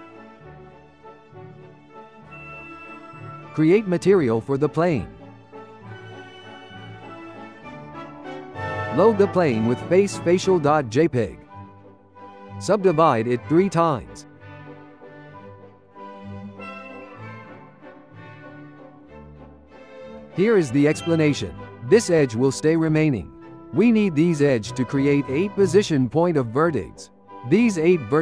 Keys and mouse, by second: 0.5-1.7 ctrl+middle drag, 1.7 z, 3.9-5.3 drag, 5.6-8.6 drag, 9.9 click, 11.6 Tab, 12.3-17.3 right drag, 17.3 2, 18.0 ctrl+middle click, 18.5 click.